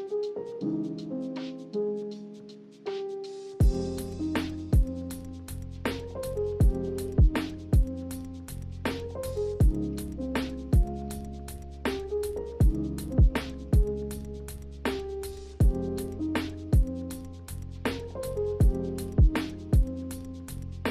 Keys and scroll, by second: 0.4 b, 2.3 a, 5.1 a, 6.0 s, 8.5 ctrl+c, 8.7 ctrl+v, 17.2 n.